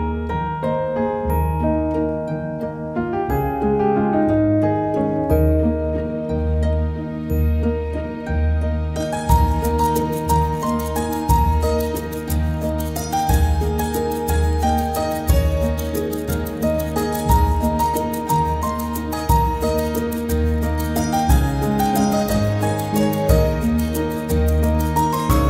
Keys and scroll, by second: 4.7 space.